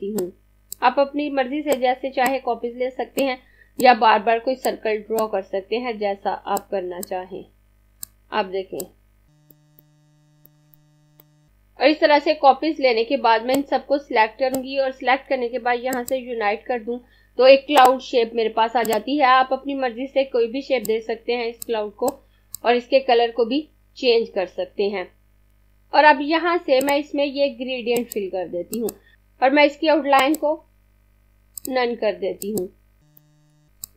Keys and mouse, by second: 0.5 click, 3.5 click, 5.0 click, 6.8 click, 8.5 click, 9.8 click, 10.7 click, 13.5 click, 25.5 click, 33.1 click.